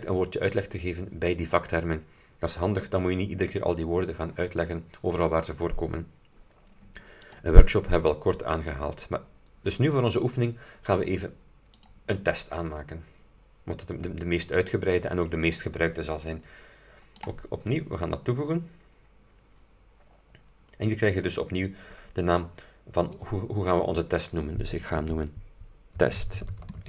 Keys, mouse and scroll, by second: 7.4 click, 11.9 click, 17.3 click, 23.2 click, 25.8-26.8 typing.